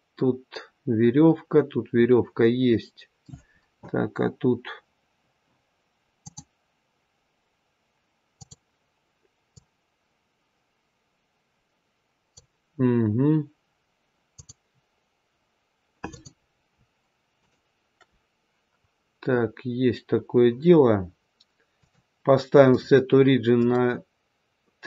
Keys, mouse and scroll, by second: 6.2 click, 9.4 click, 14.2 click, 15.9 click, 17.2 shift+click, 17.7 shift+click, 19.3-19.9 scroll down 1, 21.7 click.